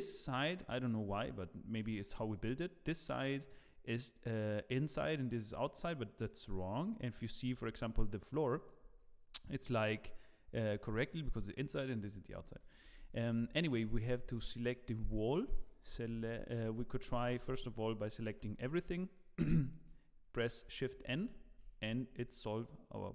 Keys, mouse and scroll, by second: 0.3 middle click, 2.2 middle click, 5.6 middle click, 6.5 middle click, 7.3-7.9 scroll down 2, 7.6 middle click, 8.3 middle click, 9.9 click, 11.7 middle click, 12.4 middle click, 12.8 scroll up 3, 13.1 shift+middle click, 13.4 click, 14.2 Tab, 15.1 middle click, 15.6 shift+middle click, 16.2 alt+a, 17.1 a, 18.3 3, 18.9 middle click, 20.9 shift+n, 21.8 scroll down 1, 21.9 Tab, 22.2 middle click.